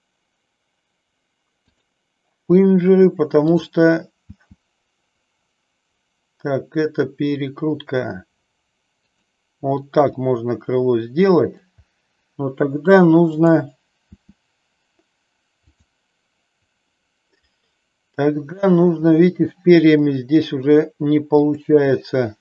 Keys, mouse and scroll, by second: 1.5 click, 3.4 click, 4.3 r, 10.0-11.4 middle drag, 13.3 click, 14.2 r, 20.0 middle click, 21.3 click.